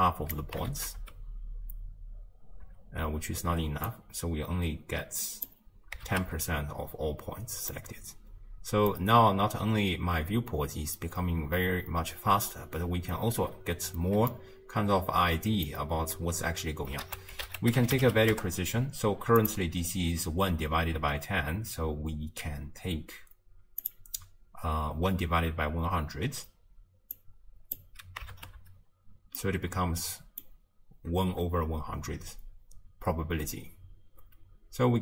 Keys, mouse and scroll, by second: 0.7 shift+space, 2.7 space, 4.1-6.1 drag, 6.1 shift+space, 7.8-10.9 middle drag, 13.3 space, 14.3-18.4 middle drag, 18.4 ctrl+a, 24.0-27.8 drag, 28.4 shift+space, 29.4-30.7 middle drag, 30.7-33.7 scroll down 1.